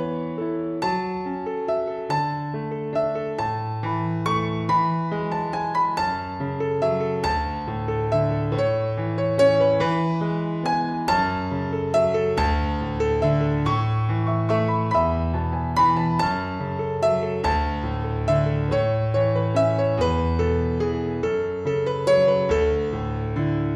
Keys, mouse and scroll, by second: 1.0 click, 6.1 click, 14.3 click.